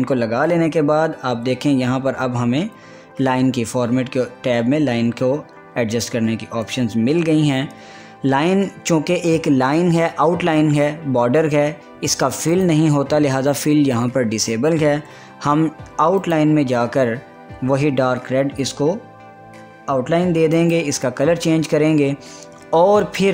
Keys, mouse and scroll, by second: 14.9 click, 18.7 click, 21.2 click, 21.4 click.